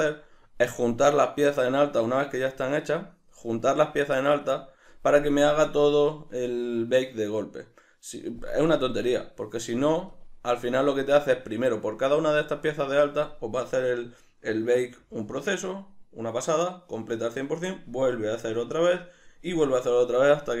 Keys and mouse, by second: 3.6 click, 3.9 click, 4.4 click, 10.1 click, 10.8 click, 11.8 click, 12.2 click, 12.6 click.